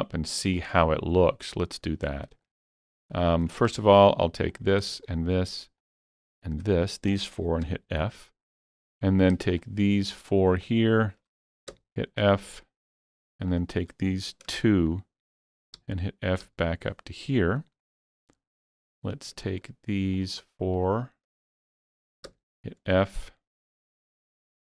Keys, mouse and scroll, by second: 2.8 scroll up 2, 3.5 scroll up 1, 3.8 shift+middle click, 4.5 click, 5.1-6.7 shift+drag, 6.7-7.7 scroll up 1, 7.7 f, 8.0 middle click, 8.0 scroll up 1, 8.9 click, 9.5 shift+click, 10.3 shift+click, 10.6 shift+click, 11.7 f, 12.2-14.9 middle drag, 14.9 shift+click, 15.8 f, 16.5 f, 17.3-17.7 scroll down 1, 17.7-20.2 middle drag, 19.0 click, 19.5 shift+click, 20.2 shift+click, 20.8 shift+click, 22.3 f, 23.0-24.7 middle drag, 24.6 shift+middle click.